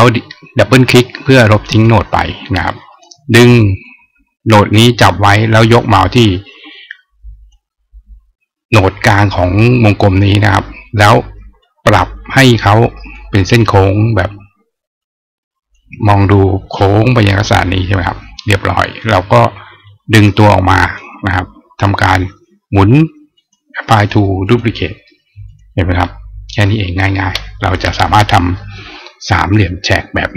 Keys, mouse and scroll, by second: 1.3 click, 3.6-7.3 drag, 11.4-12.9 drag, 14.8 click, 18.7 click, 19.7-20.7 drag, 23.2 click, 23.7 click, 24.2 click, 25.2 click.